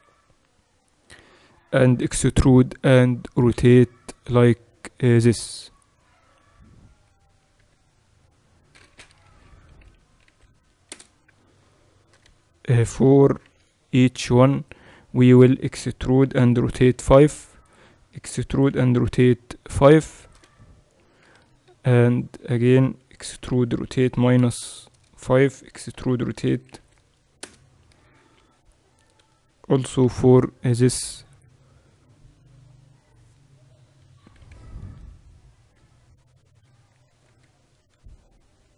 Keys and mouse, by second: 1.9 e, 9.7 r, 11.9-15.5 drag, 12.3 a, 13.6 c, 16.3 e, 18.6 e, 20.5 a, 21.3 c, 23.4 e, 26.0 e, 29.3 a, 30.1 c, 34.3 e, 36.7 r.